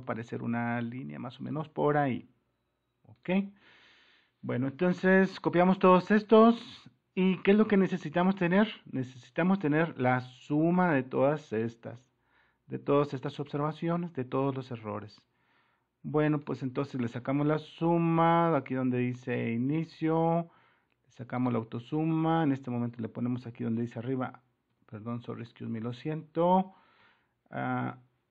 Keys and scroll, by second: 24.9 super+-, 27.0 super++.